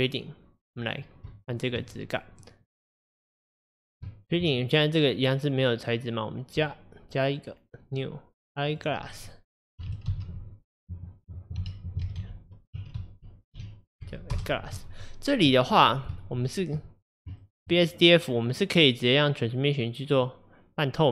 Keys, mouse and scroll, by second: 0.1-0.8 middle drag, 0.8-1.4 scroll down 1, 1.4-2.0 shift+middle drag, 2.0-2.4 scroll up 1, 2.4 middle click, 3.2 click, 3.7-4.1 scroll up 2, 4.1-6.7 shift+middle drag, 6.7-14.4 drag, 14.4 s, 16.5-19.7 shift+middle drag, 19.7-21.1 drag.